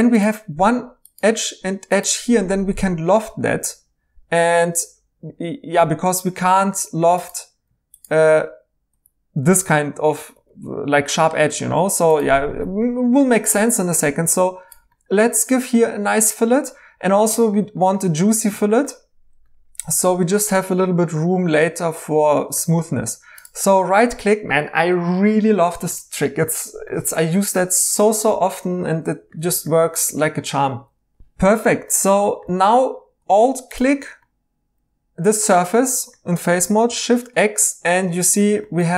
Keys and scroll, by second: 8.9 i, 10.3 Escape, 32.4 3, 36.8 x.